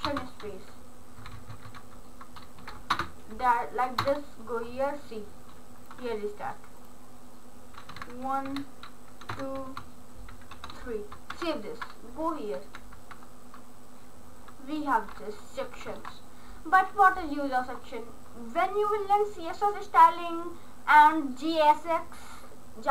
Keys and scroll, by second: 1.2 Right, 2.6 Left, 3.1 ctrl+space, 4.1 Return, 8.0 1, 8.1 Down, 8.5 Left, 9.3 Left, 9.4 Down, 9.7 Left, 10.6 3, 11.3 ctrl+s.